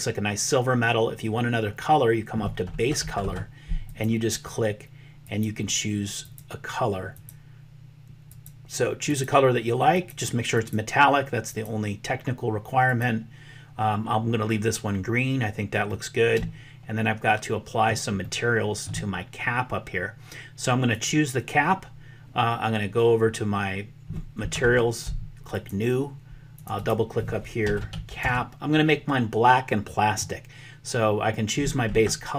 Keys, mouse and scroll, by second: 3.9 click, 16.0-17.9 middle drag, 18.2 shift+middle click, 20.9 click, 25.4 click, 26.6-29.7 drag.